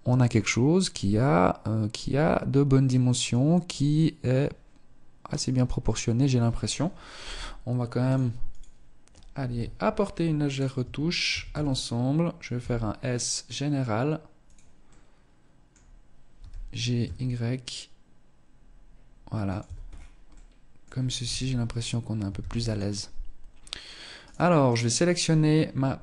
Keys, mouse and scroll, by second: 7.7 click, 8.6 KP_1, 9.1-9.7 scroll up 1, 9.7 right click, 9.7 scroll up 1, 9.9 Tab, 10.4 a, 10.7 a, 11.7 s, 13.7 click, 14.0 middle click, 15.5 g, 18.7 Tab, 19.0-19.5 scroll down 5, 19.5 middle click, 20.4 KP_0, 20.9-21.4 scroll up 1, 21.5 ctrl+s, 22.7-23.5 scroll up 2, 23.5 right click, 25.5 KP_1.